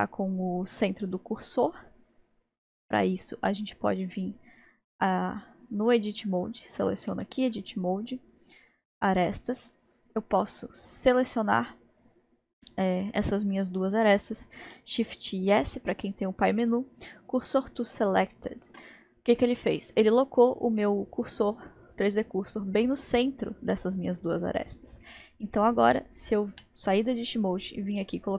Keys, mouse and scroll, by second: 0.2-0.6 scroll down 1, 2.5 scroll up 1, 6.3 click, 8.3 Tab, 8.9 click, 9.8-10.9 drag, 15.2 shift+s, 19.6-20.6 scroll up 2, 20.6-21.7 scroll up 1, 24.2-25.1 scroll down 5, 25.2 scroll up 1, 26.5 Tab, 28.3 click.